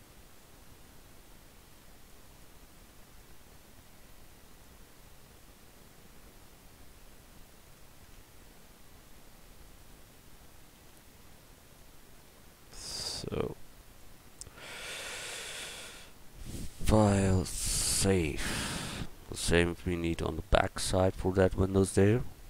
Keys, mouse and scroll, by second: 0.4-3.6 drag, 4.5-7.6 drag, 5.6 right click, 10.7 alt+d, 15.1 middle click, 15.4 a, 18.9 middle click, 20.7-22.1 scroll down 1, 22.3 middle click.